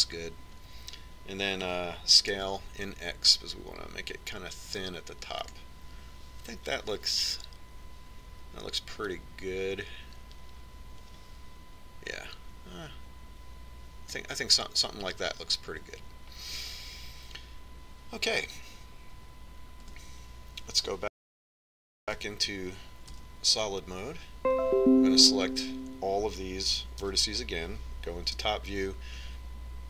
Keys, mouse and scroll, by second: 3.5 s, 11.0-12.8 drag, 21.9 Tab, 23.1 z, 24.1 Tab, 28.1 l, 29.3 KP_7.